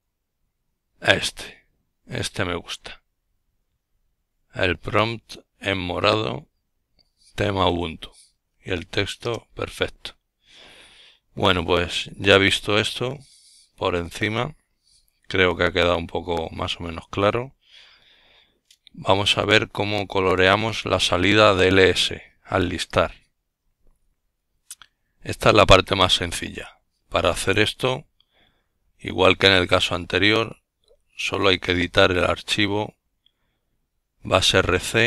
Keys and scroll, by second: 19.1 Up, 19.5-20.3 typing, 21.5-22.7 typing, 28.8-34.5 typing.